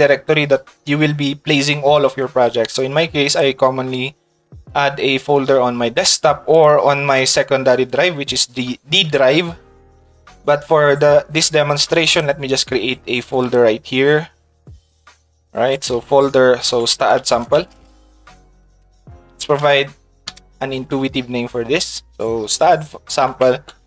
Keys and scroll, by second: 16.8 s, 17.6 d, 18.9 a, 19.5 space.